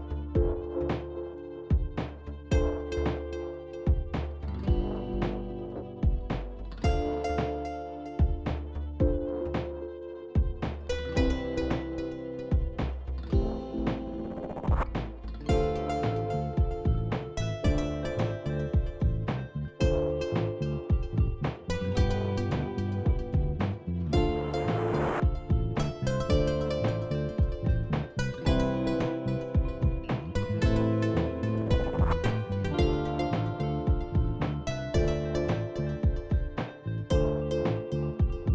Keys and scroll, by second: 13.3 ctrl+b, 23.2 KP_7, 25.5 shift+z, 33.5 ctrl+z, 38.2 shift+z.